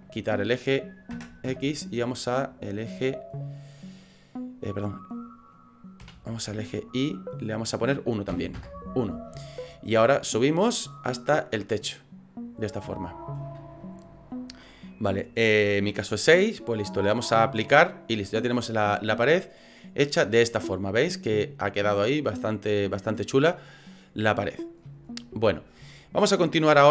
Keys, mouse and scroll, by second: 3.8 click, 4.7 click, 7.6 click, 10.2 click, 10.6 click, 10.9 click, 11.4 click, 17.6 click, 19.0 middle click, 19.8 middle click, 20.3 scroll up 3, 20.7 middle click, 23.0-23.8 scroll up 8, 24.5-25.0 scroll down 10, 25.0 scroll up 1, 25.1 scroll down 2, 25.5 shift+middle click, 25.9 middle click.